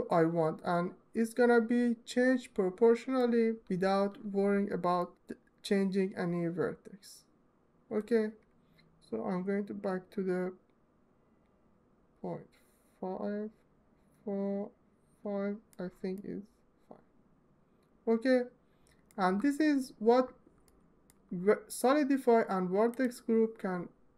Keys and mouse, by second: 3.5 Tab, 4.7-13.7 drag, 15.8 alt+middle click, 22.7 click.